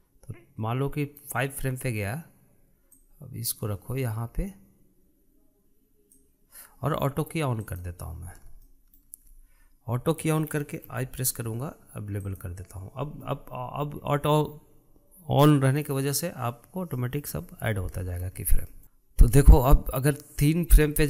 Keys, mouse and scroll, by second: 3.8 click, 8.5 click, 9.5-11.7 shift+middle drag, 11.7 i, 17.8 middle click, 18.3-18.8 scroll down 1, 18.8 shift+middle click, 19.3-21.0 drag.